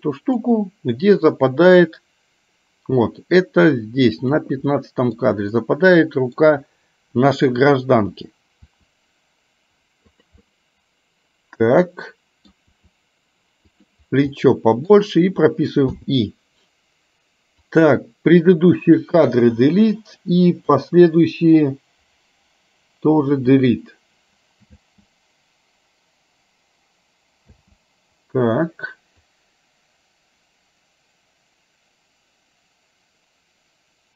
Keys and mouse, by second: 1.6-4.5 drag, 4.7 middle click, 5.6 middle click, 8.7 r, 10.5-12.6 middle drag, 12.9 r, 14.4 middle click, 16.0 i, 17.7-19.1 drag, 19.6 Delete, 20.7-23.6 drag, 23.6 Delete, 24.9 space, 27.6 space, 29.2-34.1 drag.